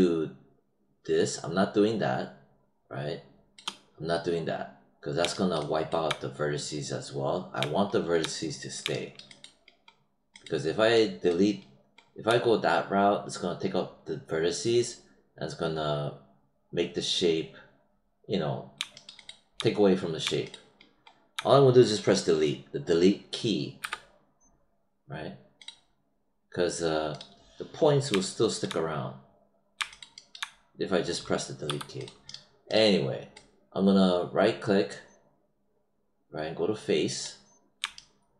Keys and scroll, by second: 23.7 Delete, 31.6 5.